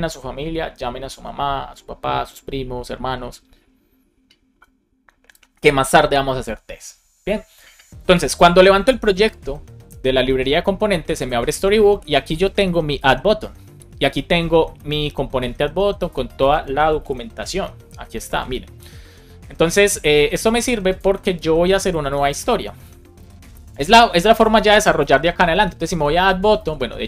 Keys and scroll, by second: 23.0 super+o, 23.9 super+p, 24.4 Escape, 24.9 super+p, 25.5 shift+a, 26.4 Return.